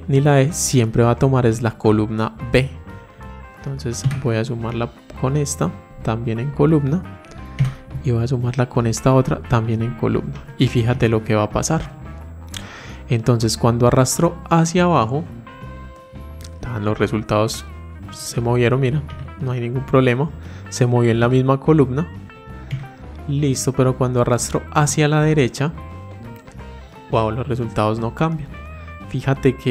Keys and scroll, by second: 5.7 F4.